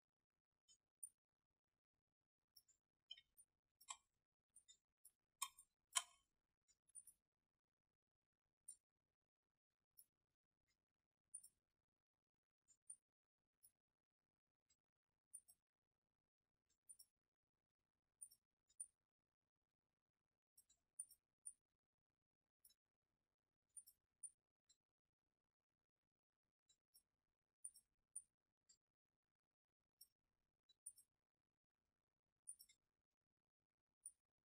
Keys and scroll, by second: 3.2 space, 4.1 alt+space, 5.4 space, 6.1 alt+space.